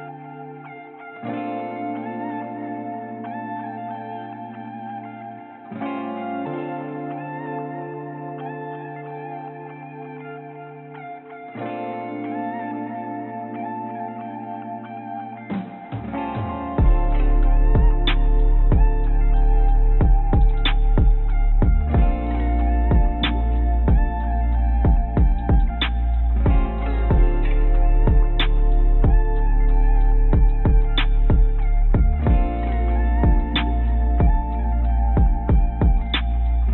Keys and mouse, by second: 1.1 Tab, 1.5 Tab, 1.7 Tab, 1.9 click, 2.4-6.7 drag, 8.3 click, 8.3 click, 11.1 click, 12.0 click, 13.0 click, 13.5 click, 14.6 click, 16.2-17.6 drag, 18.3 click, 19.3 click, 22.6 click, 23.7 click, 26.3-26.8 drag, 27.5 click, 28.9 click, 30.8-31.4 drag, 33.1-36.7 drag.